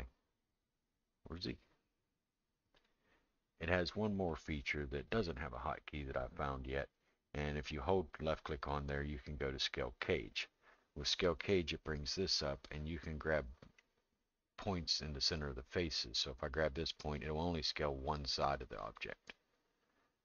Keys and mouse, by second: 7.8-10.4 drag, 12.4-13.8 middle drag, 15.8-19.0 drag, 19.8-20.2 drag.